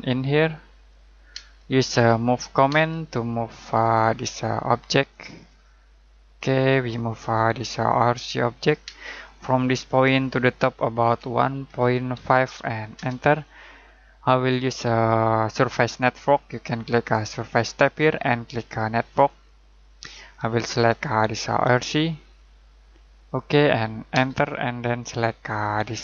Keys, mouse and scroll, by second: 1.3-2.7 typing, 3.7 click, 8.8 space, 9.5 click, 11.0-12.6 typing, 12.9 Return, 17.6 click, 24.1 space, 25.8 click.